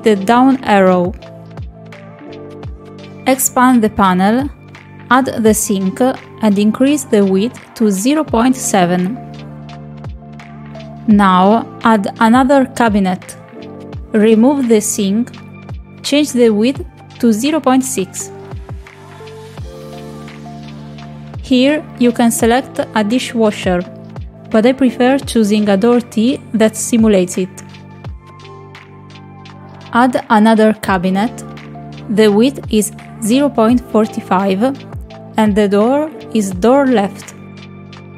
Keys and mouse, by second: 0.0 click, 3.0 click, 5.6-7.0 drag, 8.9-10.0 drag, 12.9 click, 14.4 click, 15.6 click, 18.0-19.4 drag, 20.3-21.4 drag, 22.8-24.7 drag, 25.8-27.7 drag, 30.1 click, 31.1 click, 31.8 shift+middle click, 32.9 click, 33.7-36.5 drag, 38.0-38.1 drag.